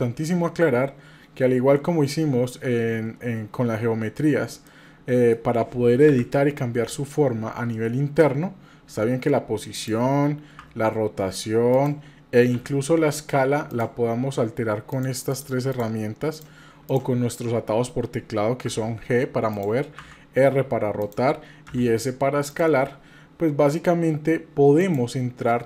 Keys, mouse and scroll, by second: 4.2 scroll down 2, 4.7 middle click, 6.1 KP_7, 8.9 g, 10.6 r, 12.5 s, 14.9 click, 15.3 click, 15.7 click, 16.3 click, 16.8 click, 18.7 g, 20.0 r, 21.7 s, 24.8-25.6 drag.